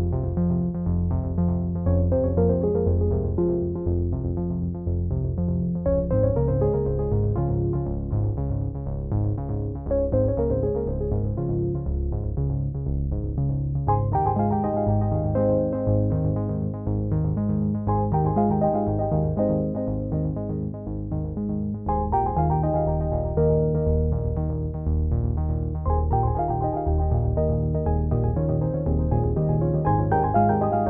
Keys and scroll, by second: 3.5 ctrl+t.